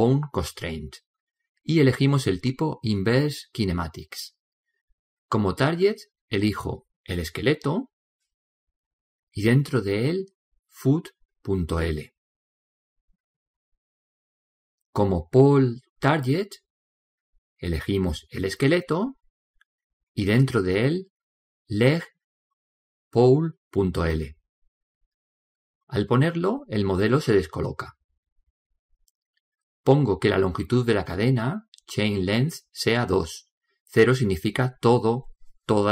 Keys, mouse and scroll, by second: 0.5 click, 6.2 click, 9.1 click, 11.1 o, 15.5-17.4 drag, 20.5 click, 27.6-29.6 middle drag, 34.0 click.